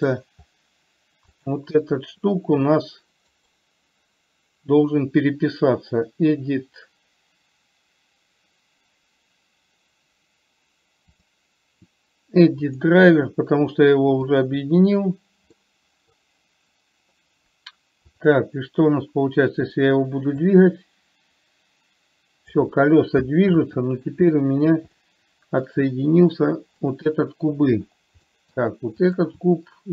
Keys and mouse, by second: 0.0 middle click, 1.7 click, 16.0 middle click, 20.7-22.9 drag, 23.9 ctrl+z, 25.4-26.0 middle drag, 27.2 click, 28.6 middle click, 29.4 click.